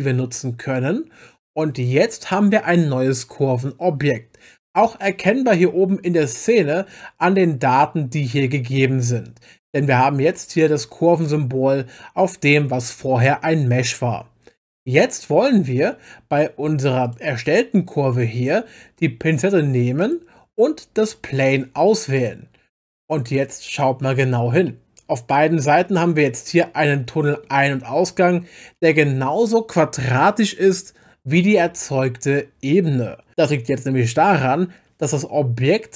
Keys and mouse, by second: 6.9 click, 17.0 click, 20.0 click, 22.2 click, 24.7-27.4 middle drag, 35.7-35.9 middle drag.